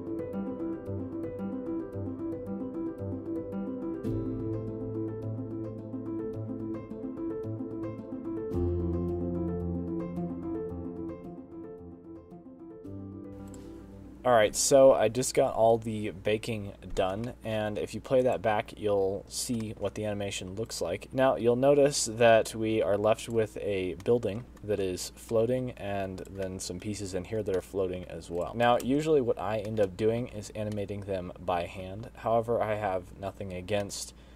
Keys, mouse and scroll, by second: 0.0-0.4 typing, 0.2 middle click, 0.5 Tab, 0.5 click, 0.6 middle click, 1.1 Left, 1.1 Down, 1.2 Left, 1.4 Right, 1.4 click, 1.8 click, 2.2 ctrl+z, 2.3 click, 2.6 click, 2.9 0, 3.0 click, 3.1 scroll down 10, 3.3 click, 3.4 scroll up 3, 3.4 scroll down 1, 3.6 scroll down 1, 3.6 click, 3.9 click, 4.0 click, 4.2 scroll down 5, 4.4 click, 4.9 click, 4.9-5.4 scroll up 25, 5.4 click, 5.4 middle click, 5.4-7.6 typing, 5.4 Left, 5.6 Right, 5.7 middle click, 5.8 Tab, 6.1 middle click, 6.6 Tab, 6.6 Left, 6.6 middle click, 6.6 click, 6.8 click, 7.3 click, 7.5 click, 7.6-8.0 scroll down 9, 7.8 click, 8.0 click, 8.3 click, 8.4 click.